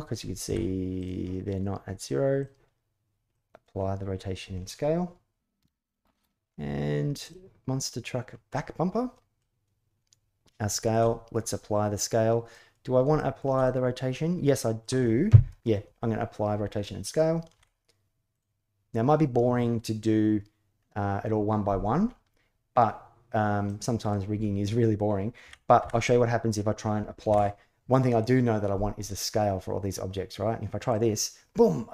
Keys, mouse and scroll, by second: 0.2 ctrl+a, 2.1 click, 3.1 middle click, 5.3 ctrl+a, 7.0 click, 8.3-9.1 middle drag, 10.5 shift+middle click, 10.8-11.3 middle drag, 12.3 middle drag, 13.0 shift+middle drag, 13.4-14.6 middle drag, 15.3 KP_1, 16.4 KP_3, 17.3 ctrl+a, 23.4-23.9 middle drag, 25.2 a, 25.6 a, 27.0 ctrl+a.